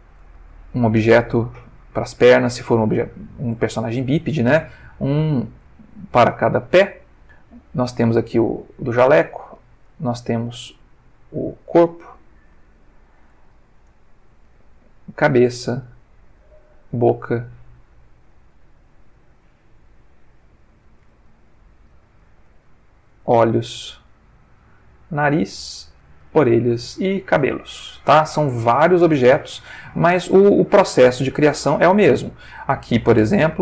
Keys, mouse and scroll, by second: 0.7 click, 1.4 g, 2.1 Escape, 2.9 shift+middle click, 4.1 click, 4.6 g, 5.4 Escape, 5.9 shift+middle click, 7.2 shift+click, 8.0 g, 9.2 Escape, 9.9 click, 10.7 g, 12.1 Escape, 12.6 shift+middle click, 13.9 click, 14.5 g, 15.1 Escape, 15.6 click, 15.9 g, 16.9 Escape, 17.2 click, 18.1 click, 19.1 click, 20.0 click, 21.4-22.1 ctrl+middle drag, 22.5 click, 23.2 g, 23.7 Escape, 24.4 click, 25.1 g, 25.6 Escape, 26.0 click, 26.2 g, 26.8 Escape, 27.2 click, 27.3 g, 28.0 Escape, 28.5 ctrl+middle click, 29.5 ctrl+shift+middle click, 30.4 shift+middle click, 31.1 ctrl+shift+middle click, 32.1 click.